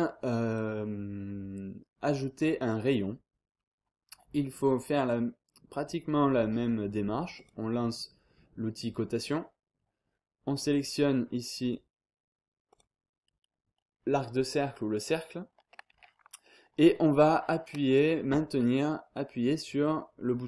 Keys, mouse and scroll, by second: 0.5 click, 1.0-1.4 scroll down 2, 1.4-1.9 scroll up 2, 7.3 click, 10.6 click, 12.7 click.